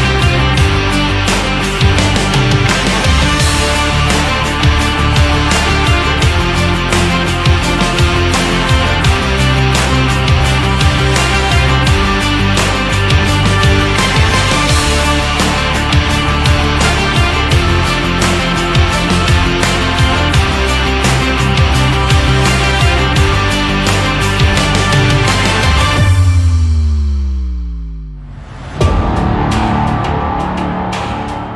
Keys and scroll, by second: 21.9 ctrl+z.